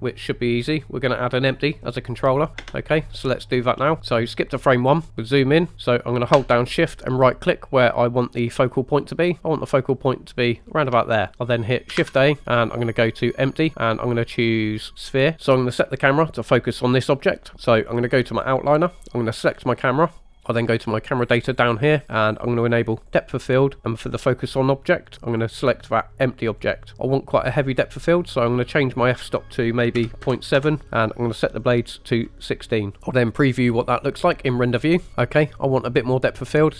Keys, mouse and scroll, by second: 2.6 space, 4.0 click, 5.1-5.4 scroll up 4, 5.7-10.7 shift+middle drag, 10.7 shift+right click, 12.0 shift+a, 19.2 click, 21.5 click, 23.0 click, 25.3-26.6 drag, 29.1-30.9 drag, 31.7 click, 34.9 click.